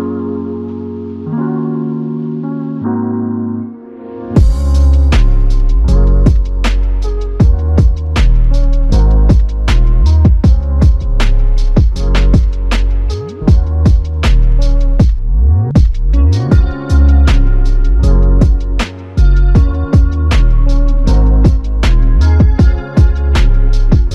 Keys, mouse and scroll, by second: 5.8 ctrl+click, 9.4 ctrl+click, 10.0 ctrl+click, 16.3 shift+click, 17.6 shift+click.